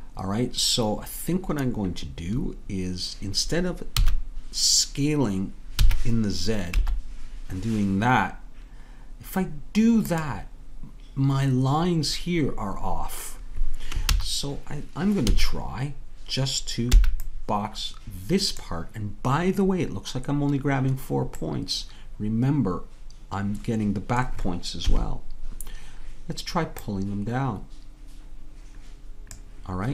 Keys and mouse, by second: 4.0 a, 14.1 ctrl+z, 15.2 a, 21.8-24.8 middle drag, 24.8 KP_3, 26.9-29.3 drag.